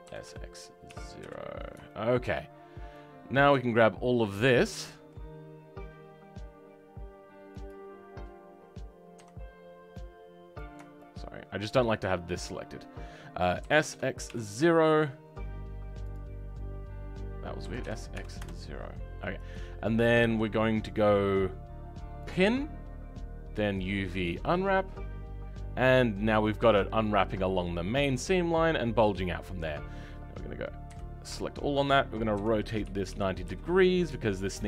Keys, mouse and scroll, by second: 3.4 click, 9.1 a, 13.6 s, 22.3-34.6 right drag.